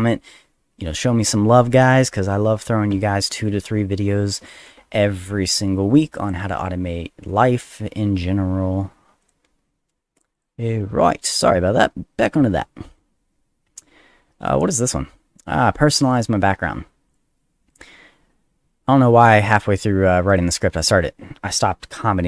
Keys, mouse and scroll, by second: 5.2 click, 6.2 click, 9.2 click, 9.7 middle click, 10.3 click, 15.2 middle click, 17.1 click, 17.7 click, 18.9 middle click, 19.4 middle click, 20.3 click, 20.7 click.